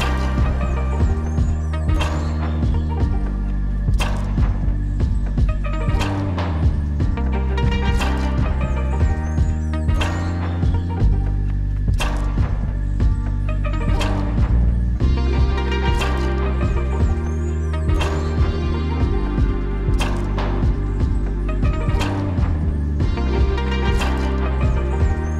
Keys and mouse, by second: 0.8 ctrl+z, 1.0 ctrl+z, 1.1-4.6 typing, 1.2 click, 1.6 ctrl+z, 1.8 click, 2.4 click, 3.2 click, 3.6 ctrl+z, 3.7 click, 4.0 ctrl+z, 4.1 click, 4.6 click, 5.1 ctrl+z, 6.3 ], 6.6 ], 6.6 ], 6.6 click, 8.8 [, 8.9 click, 9.5 ctrl+z, 10.2-10.6 ], 11.3 ctrl+z, 11.4 ], 11.5 ], 12.0 ctrl+z, 12.0 [, 12.2 click, 13.5 ctrl+z, 13.7-17.5 typing, 14.9 click, 15.4 click, 15.8 ctrl+z, 16.0 click, 16.8 click, 17.4 ctrl+z, 17.6 click, 19.4 click, 19.9 ctrl+z, 19.9 click, 19.9 ], 20.3 ], 20.4 click, 24.0 click.